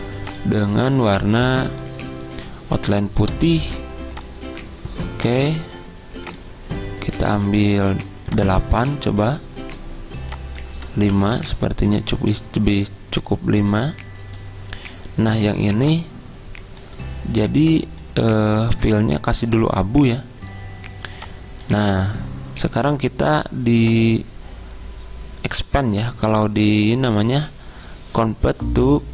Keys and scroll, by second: 11.2 5, 11.5 Return.